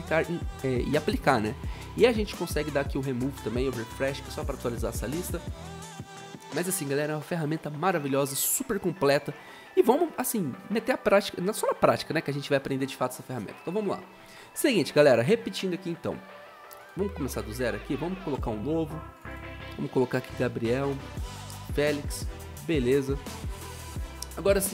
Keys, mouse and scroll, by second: 17.4 Delete, 19.6-21.9 typing.